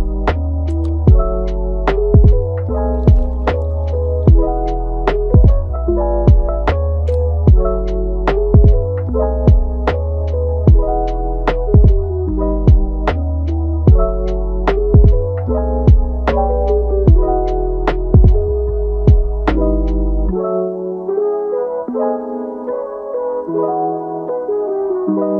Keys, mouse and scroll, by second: 0.5-2.4 shift+middle drag, 2.4-3.5 drag, 3.5 ctrl+z, 4.0-10.0 drag, 10.0-11.4 middle drag, 11.4 click, 12.3 scroll down 3, 12.4 middle click, 13.3-14.5 scroll up 1, 14.5-18.5 drag, 18.5-19.2 scroll up 2, 19.2-22.2 drag, 22.2 scroll down 1, 22.5 middle click, 22.9-23.3 scroll up 1, 23.3-24.3 middle drag, 24.3-25.3 drag.